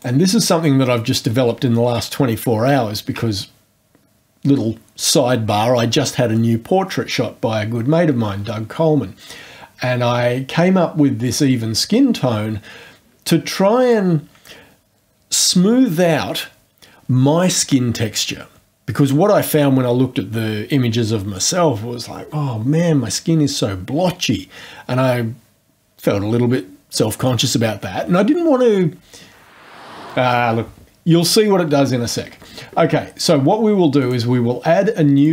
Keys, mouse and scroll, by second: 11.2 click, 13.8 click, 34.0 click, 35.1 click.